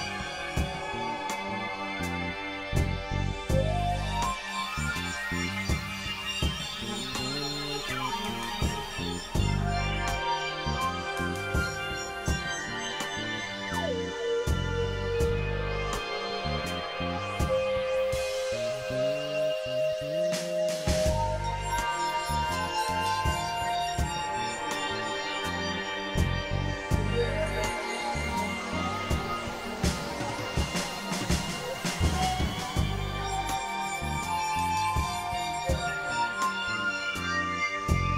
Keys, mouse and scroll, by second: 0.3 ctrl+z, 1.2 click, 2.1 click, 3.6 click, 5.4 click, 7.8 KP_Divide, 8.5 click, 9.3 space, 11.0 middle click, 12.9 click, 13.5 middle click, 13.9 right click, 14.3 KP_Divide, 14.6-16.1 middle drag, 17.2 KP_1, 17.5-18.8 middle drag, 18.8 KP_1, 20.3 click, 22.8 click, 24.2 click, 24.9 click, 25.5 click, 26.4 click, 29.8 click, 30.6 click, 32.0 ctrl+z, 32.1 ctrl+z, 32.2 ctrl+z, 33.2 x, 33.3 click, 34.1 click, 35.6 click, 36.8-37.5 drag.